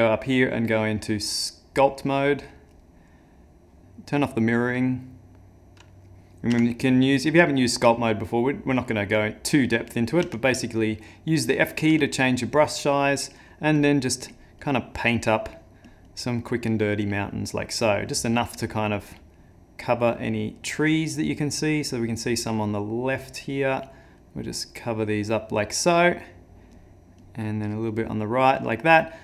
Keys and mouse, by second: 0.1 click, 4.9 click, 6.5 f, 10.2 f, 11.9 f, 13.1 click, 13.8 click, 14.3 click, 14.6 click, 15.2 click, 15.5 click, 15.9 click, 16.1 click, 17.0 click, 18.1 click, 18.7 click, 19.0 click, 20.6 click, 20.9 click, 21.3 click, 21.6 click, 22.0 click, 22.3 click, 22.6 click, 24.2 click, 24.6 click, 26.7 click, 27.2 click.